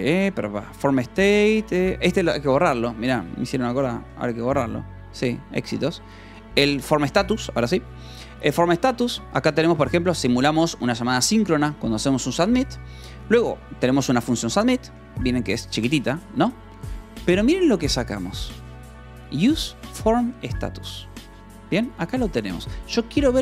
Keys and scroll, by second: 0.3 =, 1.8 d, 4.0 w, 4.2 Return, 5.0 o, 6.1 Return, 6.6-9.9 typing, 9.1 Escape, 11.3 Escape, 11.4 k, 11.8 j, 12.5 Escape, 12.7 j, 13.2 j, 14.8 Escape, 14.9 k, 16.6 shift+v, 17.3 Escape, 20.2 f, 21.2 u, 21.8 v, 22.4 e.